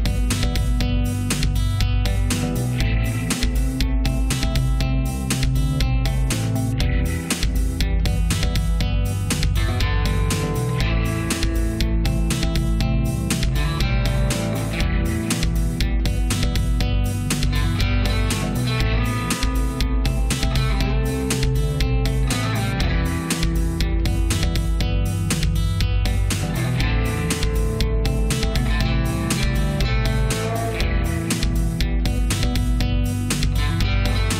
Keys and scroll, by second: 3.3 space, 29.1 space.